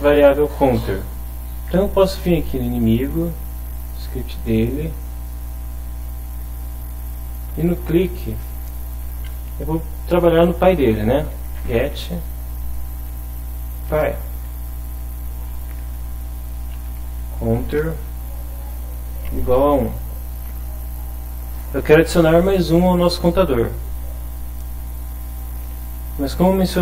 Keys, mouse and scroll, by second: 0.1 click, 2.3 click, 3.6 click, 4.7 click, 7.2-8.4 drag, 11.3-12.9 typing, 13.9 Return, 15.9-19.7 typing.